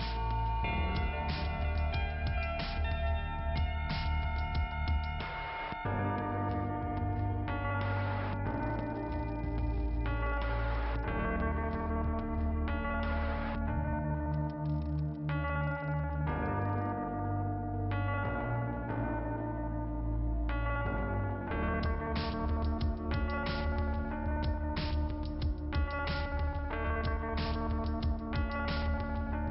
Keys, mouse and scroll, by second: 1.2 click, 1.3 click, 1.5 click, 3.1 scroll up 2, 4.2 click, 9.6 middle click, 10.6 scroll down 1, 11.6 click, 12.0 click, 12.1 double click, 12.5 scroll down 2, 13.0 click, 14.8 click, 15.8 click, 19.2 scroll up 1, 21.2-22.0 scroll up 2, 22.5 click.